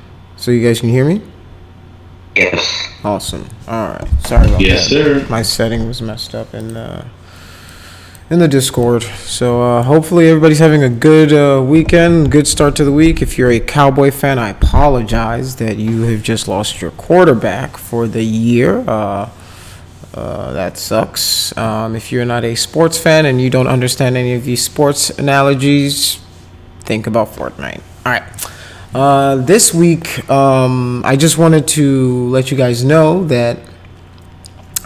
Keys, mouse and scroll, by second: 6.6 click, 7.7 click, 8.8-9.8 drag.